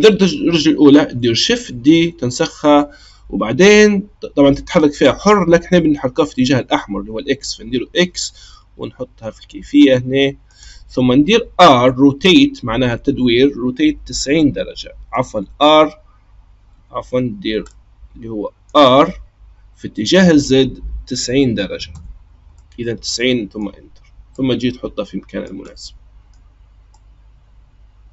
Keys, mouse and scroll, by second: 1.4 shift+d, 11.7 r, 17.7-18.8 middle drag, 18.8 r, 22.5-24.3 middle drag, 24.3 click, 25.6-26.9 middle drag, 26.9 click.